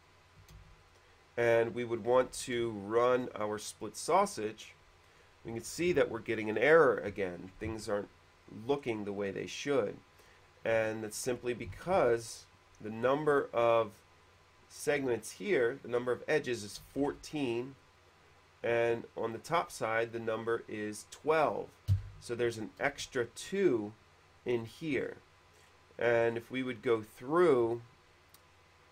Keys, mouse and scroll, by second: 0.5 click, 0.9 space, 0.9 q, 2.5 shift+f, 3.4 shift+click, 4.7 click, 8.9 middle click, 9.8 click, 11.3 ctrl+z, 12.1 ctrl+space, 14.5 click, 17.2 ctrl+space, 18.1 click, 19.7 click, 23.3 space, 25.3 middle click, 25.7 middle click, 25.9-26.7 scroll up 2, 27.0-27.3 scroll down 1, 27.7 q, 27.7 space, 28.2 q, 28.2 space.